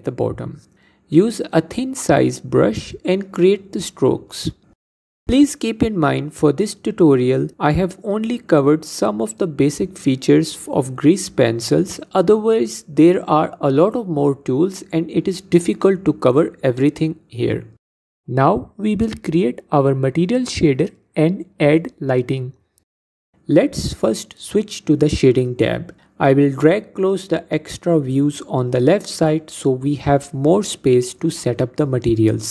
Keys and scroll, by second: 8.1 ctrl+Tab.